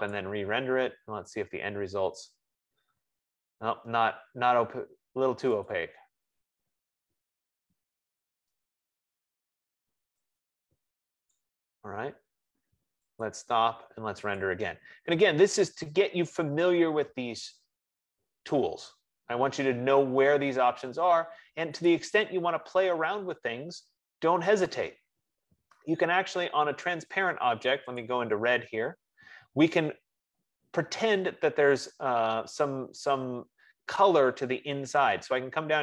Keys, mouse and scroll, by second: 0.7 click, 6.1 click, 11.7 click, 14.0 click, 15.7 click, 19.4 F15, 21.4 F15, 22.4 click, 25.4-27.4 drag, 29.4-33.4 drag.